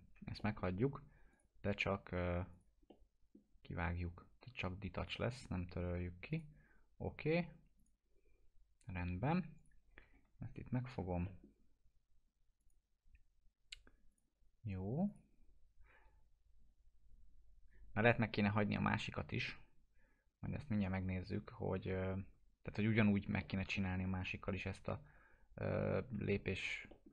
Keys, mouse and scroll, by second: 0.4 middle click, 1.3 click, 3.2 middle drag, 5.1 click, 10.0 alt+q, 10.7 scroll up 1, 11.2 middle click, 12.6 click, 23.3 click, 23.4-26.2 alt+middle drag, 26.5 w, 26.9 alt+middle click.